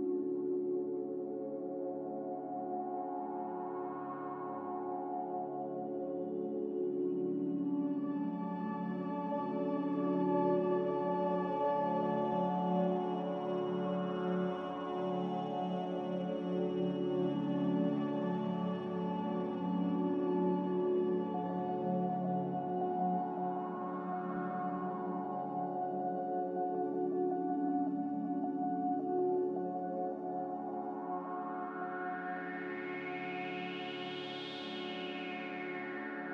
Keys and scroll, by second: 20.7 z, 30.9 a, 35.4-36.3 typing.